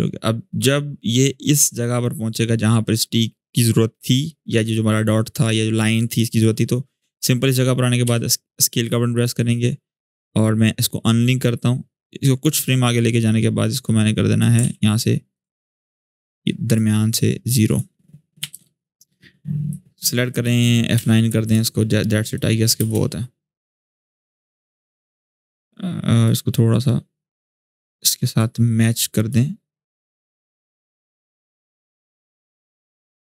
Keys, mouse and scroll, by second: 6.0 click, 7.8 s, 8.9-12.2 drag, 13.3-14.3 click, 14.3 ctrl+z, 15.1-16.6 drag, 18.1 0, 18.3 Return, 19.4-20.4 click, 20.7 F9, 21.2 click, 22.5 space, 24.4-25.3 drag, 26.0-27.5 drag, 28.1-29.0 drag, 30.3-31.3 drag.